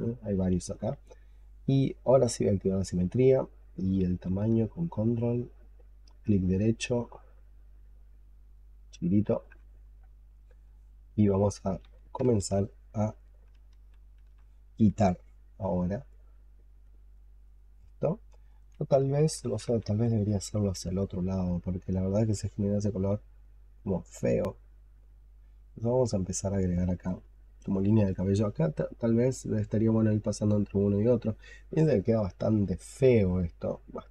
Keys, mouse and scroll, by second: 4.7 ctrl+right click, 12.2 ctrl+z, 13.0 double click, 13.6 ctrl+z, 16.0 double click, 16.4 double click, 16.7 double click, 17.0 double click, 17.3 double click, 17.6 double click, 18.6-22.2 drag, 18.6 ctrl+z, 22.2 x, 23.6 double click, 23.9 double click, 24.1 double click, 24.3 double click, 24.6 double click, 24.8 double click, 25.0 double click, 25.3 double click, 25.6 double click, 25.8 double click, 26.2 double click, 26.4 double click, 26.6 double click, 26.8 double click, 27.2 double click, 27.5 double click, 27.6 double click.